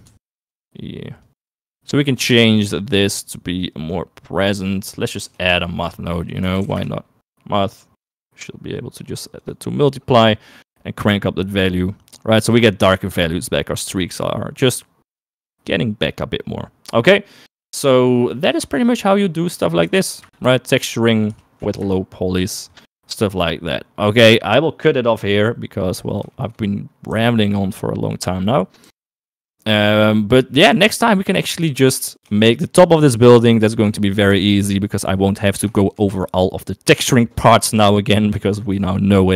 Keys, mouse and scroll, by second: 0.4 ctrl+z, 1.5-2.6 drag, 3.1-4.4 drag, 5.0 click, 5.6 middle click, 6.1 shift+a, 8.6-9.9 drag, 10.9-13.1 drag, 18.6-20.4 drag, 21.1 click, 26.5 shift+middle click, 27.4 s, 29.0 g, 30.8 s, 32.5 shift+middle click, 35.9 shift+middle click.